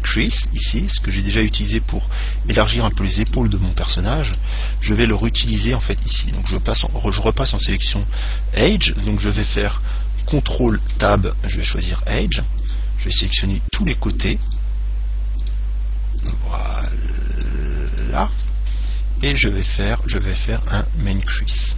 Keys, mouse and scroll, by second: 2.3-3.0 scroll up 1, 3.0-5.2 middle drag, 5.3 right click, 6.8 ctrl+Tab, 11.2 ctrl+Tab, 12.9-19.9 right drag, 21.5 click.